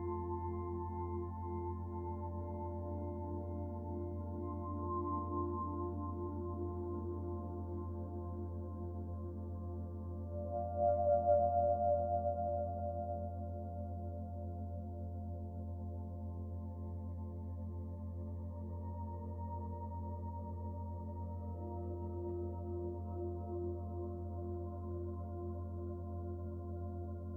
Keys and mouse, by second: 11.9-13.0 middle drag, 13.4-14.0 shift+middle drag.